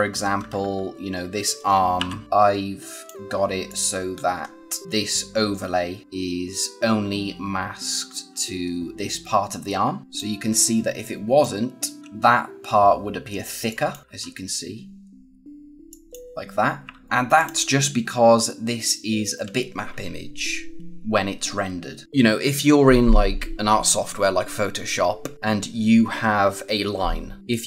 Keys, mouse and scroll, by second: 0.3 b, 0.5 b, 0.9 b, 1.9 o, 2.2 click, 3.3 scroll down 1, 3.6 click, 4.0-4.5 scroll up 1, 10.0 space, 10.4 scroll up 1, 10.9 click, 12.0 z, 13.6 click, 14.0 ctrl+z, 15.8 click, 16.9 ctrl+z, 17.0 scroll down 1, 17.3 click, 18.6-19.6 scroll up 1, 25.3 scroll up 1.